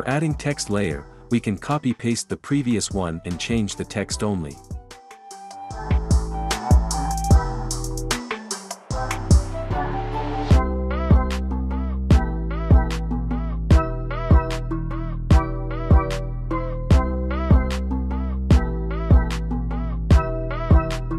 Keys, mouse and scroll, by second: 1.3 ctrl+c, 2.2 click, 4.5 ctrl+v, 6.3 click, 7.9 super+v, 10.3 click, 10.5 ctrl+v, 12.3 click, 13.7 space, 19.6 space, 21.0 click.